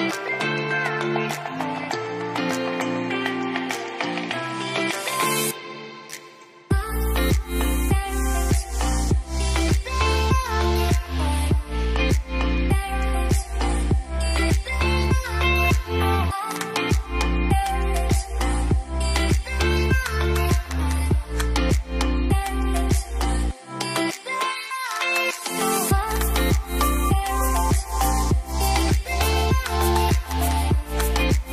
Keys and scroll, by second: 0.9 ctrl+z, 30.6 alt+g.